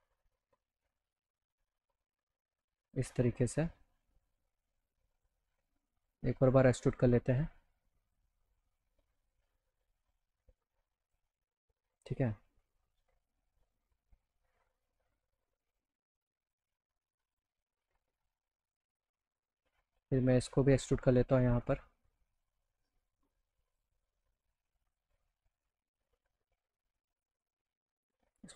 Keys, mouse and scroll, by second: 2.9 click, 3.9-5.2 drag, 5.7 click, 6.1 right click, 6.8 click, 7.6 click, 8.4 click, 9.2-11.1 drag, 13.9 alt+middle click, 15.3 alt+middle click, 17.3 click, 19.3 click, 20.5 click, 20.7 right click, 22.4-23.8 drag, 24.8 click, 26.5 alt+middle click, 27.2 alt+click.